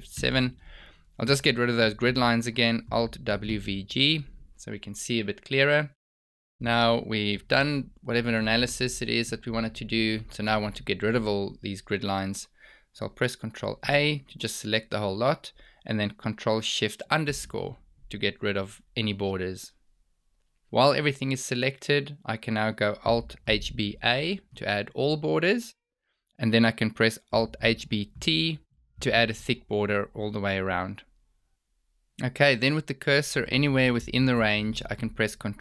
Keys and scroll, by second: 3.2 alt+w, 3.4 v, 3.7 g, 13.4 ctrl+a, 16.3 ctrl+shift+-, 23.7 alt+h, 23.9 b, 24.1 a, 27.6 alt+h, 27.8 b, 28.1 t.